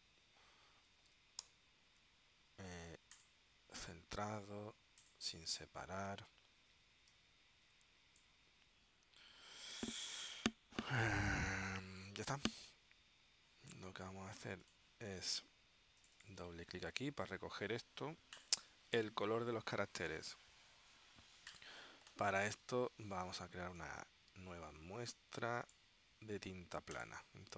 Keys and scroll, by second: 1.5 alt+super+t.